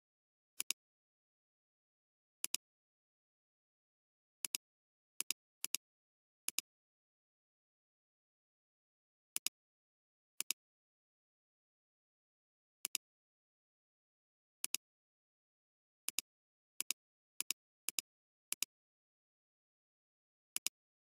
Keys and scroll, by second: 4.3 alt+space, 9.2 alt+space, 11.9 alt+space, 12.8 alt+space, 13.6 alt+space, 14.7 alt+space, 15.2 alt+space.